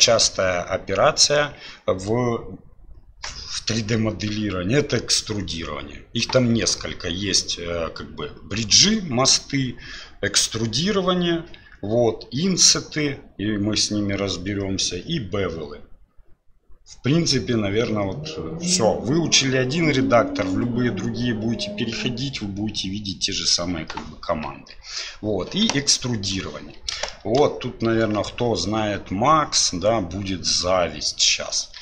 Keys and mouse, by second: 27.1 shift+click, 27.1 shift+middle click.